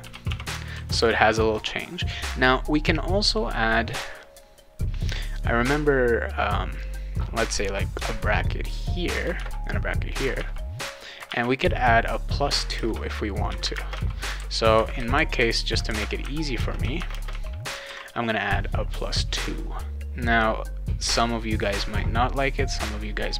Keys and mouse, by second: 0.0-0.8 typing, 6.7 click, 7.9 shift+9, 9.1 click, 9.3 shift+0, 10.1 click, 10.4 shift+0, 11.1 click, 11.3 shift+9, 12.1 click, 12.8 space, 13.6 shift+=, 13.7 space, 13.9 2, 16.6 space, 17.1 space, 17.3 2, 17.9 ctrl+s.